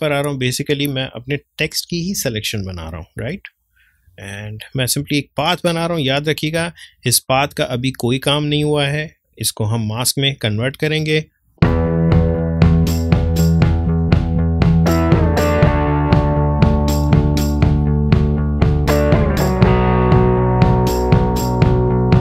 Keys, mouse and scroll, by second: 4.1 ctrl+space, 4.4 ctrl+click, 4.7 ctrl+space, 6.1 click, 6.6 space, 6.7 click, 7.1 space, 7.6-16.3 ctrl+drag, 16.3 ctrl+space, 16.4 ctrl+click, 17.7 ctrl+z, 17.9 click, 18.9 ctrl+z, 19.1 click, 19.4 space, 19.8 click, 20.4 space, 20.5 click, 20.5 space, 20.9 click, 21.3 ctrl+space, 21.4 ctrl+click, 21.7 ctrl+space.